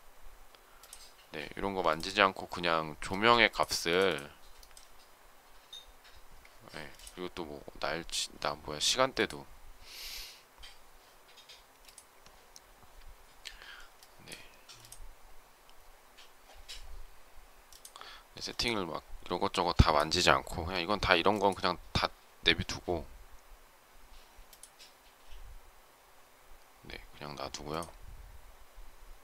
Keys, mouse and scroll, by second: 2.9 space, 6.4 Escape.